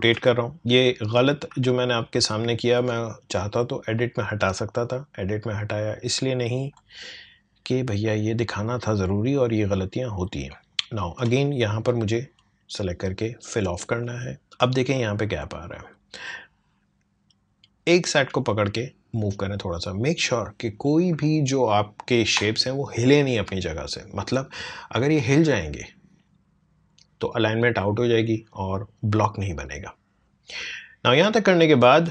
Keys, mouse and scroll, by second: 2.2 click, 3.4 right click, 4.8-8.1 drag, 11.8-23.2 drag, 31.4-32.1 drag.